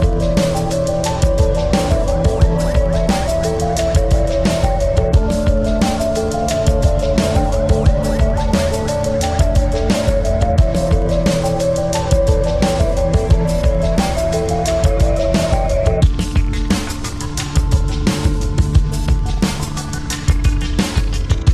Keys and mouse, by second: 0.7 click, 0.7 typing, 3.3 click, 3.3 typing, 4.5 click, 4.5 typing, 5.9-8.2 drag, 5.9 typing, 8.4 click, 8.4 typing, 10.0 click, 10.0 typing, 11.4 right click, 11.4 typing, 12.9 click, 12.9 typing, 13.5-15.8 shift+drag, 17.2 click, 17.2 typing, 19.3 click, 19.3 typing, 20.9-21.5 drag, 20.9 typing.